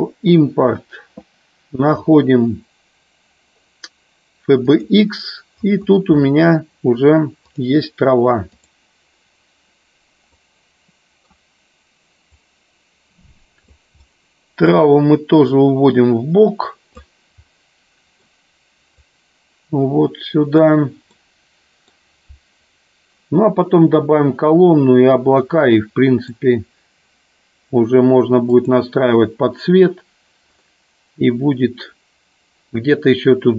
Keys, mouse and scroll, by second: 10.4 middle click, 12.4-13.6 drag, 13.9-14.6 middle drag, 15.4-17.0 drag, 17.4 scroll up 1, 17.6 middle click, 19.0-20.5 drag, 21.1 scroll up 1, 21.2-21.9 middle drag, 25.4-26.2 middle drag.